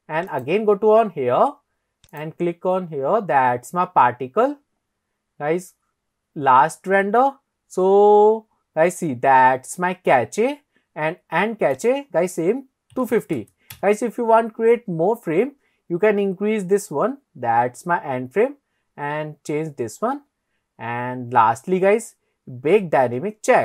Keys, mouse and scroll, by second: 0.3 click, 2.1 click, 4.2-4.6 scroll down 3, 5.3-6.3 scroll down 3, 6.3-9.4 scroll down 2, 9.7-11.8 scroll up 2, 11.8-23.6 drag.